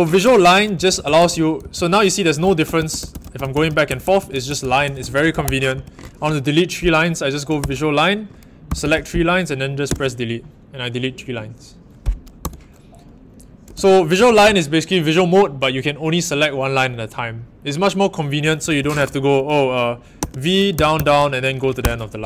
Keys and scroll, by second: 0.2-5.7 typing, 7.6 shift+v, 8.6 typing, 9.8 d, 12.4 u, 13.5-14.8 typing, 18.6 Escape, 18.7 typing, 20.1-22.2 typing.